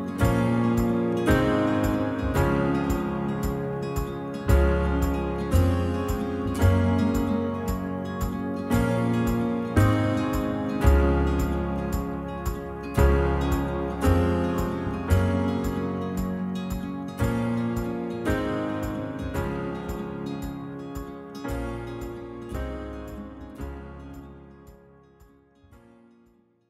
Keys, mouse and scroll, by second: 0.6-1.6 shift+middle drag, 1.6 c, 3.1 right click, 3.3 click, 3.6 middle drag, 3.8-4.5 scroll down 1, 4.5-4.8 middle drag, 4.8-5.2 scroll up 1, 5.2 middle click, 5.4 scroll up 1, 5.6-6.2 middle drag, 6.2-7.0 scroll up 1, 7.0 l, 7.2 h, 7.7 alt+click, 8.4 alt+shift+click, 9.0 shift+middle drag, 9.3 scroll up 1, 9.4-10.1 middle drag, 10.1 scroll up 1, 10.2-10.6 shift+middle drag, 10.6 alt+shift+click, 11.0 alt+shift+click, 11.7 alt+shift+click, 11.9 shift+middle click, 12.7-13.6 scroll up 2, 13.6 alt+shift+Left, 13.8 alt+shift+Left, 14.4 alt+shift+click, 14.5 middle click, 15.2-15.6 scroll up 1, 15.6 scroll down 2, 15.7-17.1 middle drag, 17.3 click, 17.9 ctrl+r, 18.8 click, 18.9 middle click, 19.1-19.9 scroll up 1, 19.9 ctrl+z, 20.2 s, 22.8 click, 22.9-23.5 scroll down 3, 23.0 middle drag, 23.5-24.7 middle drag, 24.7-25.7 scroll up 1, 25.7-26.6 middle drag.